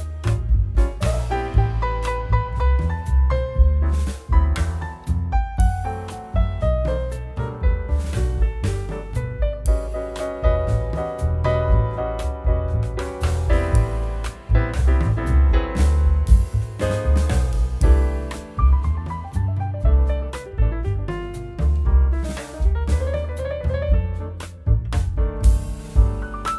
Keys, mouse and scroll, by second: 1.6 alt+w, 2.3 alt+middle click, 2.3-3.0 alt+scroll down 2, 10.5 scroll, 10.6 alt+w, 17.4 ctrl+s, 17.4 double click.